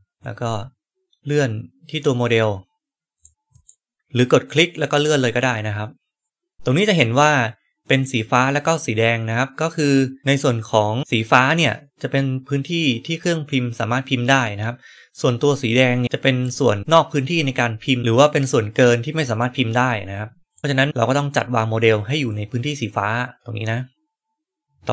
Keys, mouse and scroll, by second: 0.1-3.1 drag, 0.1-3.0 right drag, 3.4 click, 3.9-16.0 drag, 16.4-18.0 right drag, 20.5 right click, 22.2-24.6 right drag.